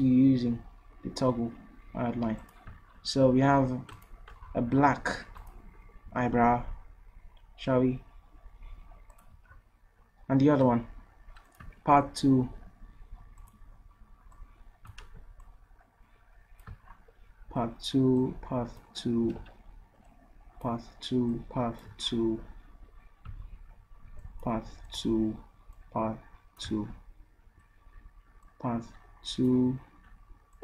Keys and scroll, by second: 15.1 ctrl+z, 19.7 ctrl+z.